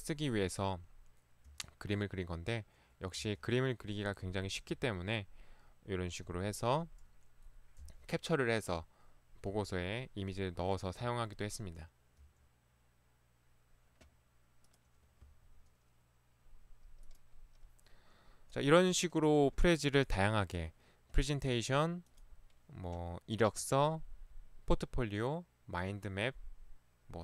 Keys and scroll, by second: 1.5 Right, 3.3 Right, 4.9 Right, 6.2 Right, 7.8 Right, 9.5 Right, 11.1 Right, 12.2 Right.